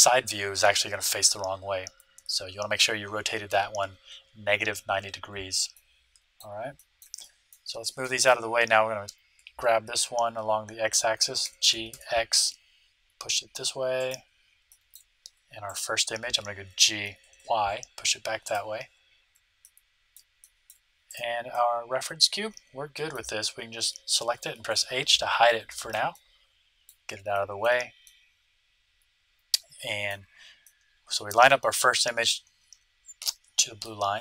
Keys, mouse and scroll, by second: 5.7-9.8 middle drag, 11.4 g, 14.6-17.1 middle drag, 15.6-17.3 right drag, 16.7 g, 17.5 right click, 19.6-22.8 middle drag, 22.4 right click, 22.5 right click, 22.9 middle click, 22.9 right click, 24.6 h, 25.6 middle click, 26.7-29.6 middle drag, 30.6 middle click, 31.3-34.2 middle drag.